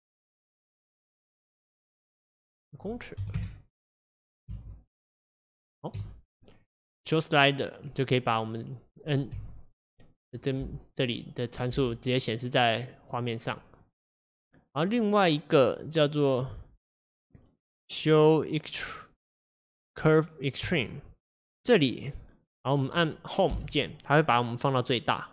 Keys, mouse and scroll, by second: 4.4 space, 6.0 space, 10.5 click, 10.7 n, 13.2 click.